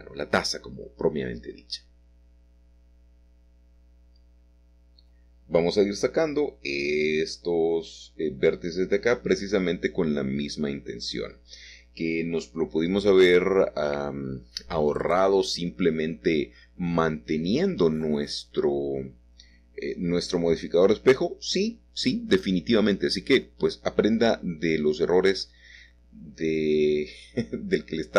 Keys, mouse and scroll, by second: 2.5-6.2 drag, 6.4-7.6 drag, 11.4 g, 12.1 x, 14.5 click, 15.3 shift+click, 16.7 click, 17.0 click, 21.0 scroll down 2, 21.0 middle click, 23.6-24.4 scroll up 1, 24.4-26.9 scroll up 1, 26.9-28.1 scroll up 1.